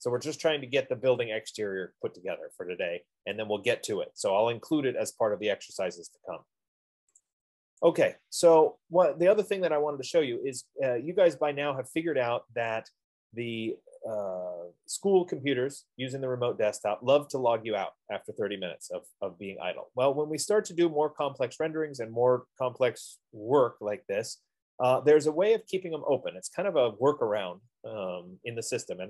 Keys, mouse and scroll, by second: 11.4 F15.